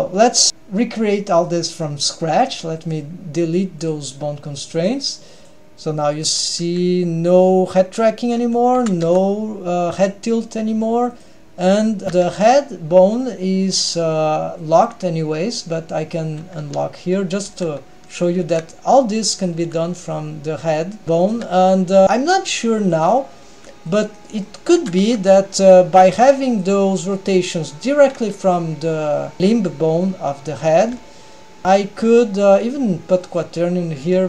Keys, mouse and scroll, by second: 0.1 g, 2.9 click, 4.0 click, 4.9 click, 5.4 click, 6.4 click, 6.8 g, 8.9 r, 12.0 click, 12.0 g, 14.1 n, 14.7 drag, 16.7 n, 17.0-17.5 scroll up 2, 17.5 r, 18.4 r, 19.7 r, 21.9 middle click, 22.0 r, 23.6 r, 24.4-24.8 middle drag, 24.9 r, 26.9-27.4 middle drag, 31.0 n, 32.8-33.7 drag.